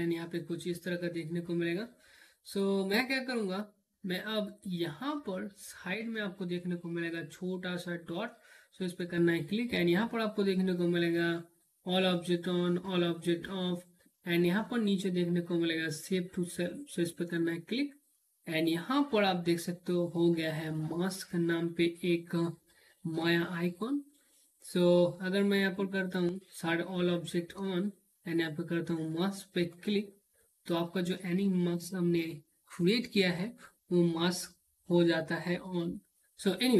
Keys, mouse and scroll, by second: 9.1 click, 16.7 click, 25.5 click.